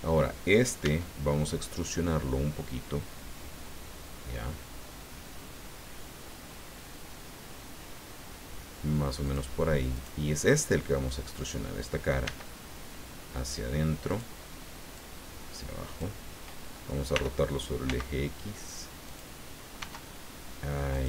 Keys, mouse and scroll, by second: 0.8 e, 9.2 click, 9.9 right click, 10.4-11.6 middle drag, 12.2 e, 14.1 click, 14.9-16.1 drag, 17.1 r, 17.8 x, 19.0 click, 19.8 s, 20.9 click.